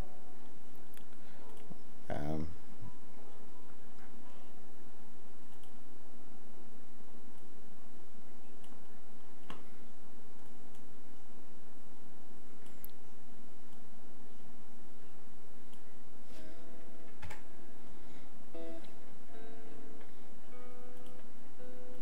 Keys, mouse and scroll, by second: 13.7 click.